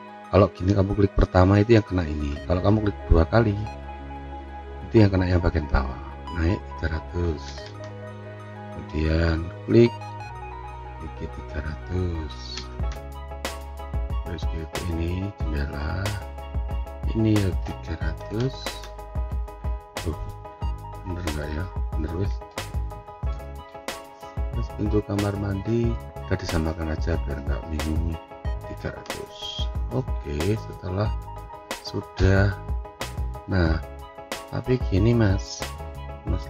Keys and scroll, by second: 7.1 3, 7.8 Return, 12.0-13.0 typing, 18.0-18.8 typing, 19.1 Return, 28.6 3, 29.0 Return.